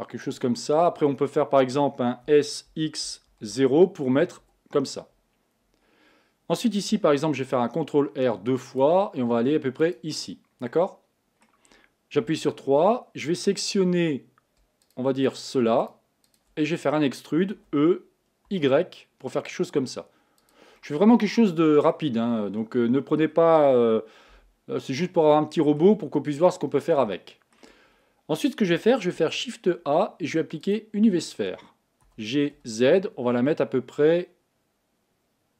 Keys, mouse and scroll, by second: 2.5 s, 7.4 ctrl+r, 10.7-12.3 middle drag, 12.3 3, 14.8 shift+click, 15.2 shift+click, 15.8 shift+click, 16.2 shift+click, 16.6-17.5 scroll down 1, 17.5 e, 20.8-22.3 middle drag, 22.3-22.7 scroll down 1, 22.7-24.3 middle drag, 24.3 KP_1, 25.3 shift+middle click, 26.0-26.8 scroll up 3, 26.8-27.1 scroll down 2, 27.1 shift+middle click, 27.6-29.1 shift+scroll up 1, 29.1 shift+a, 32.0 g.